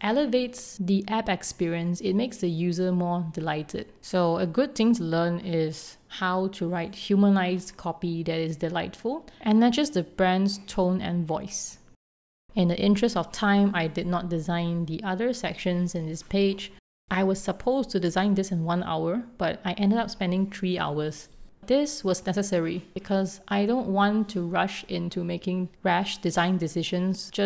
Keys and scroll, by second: 13.7 super+s, 13.9 r.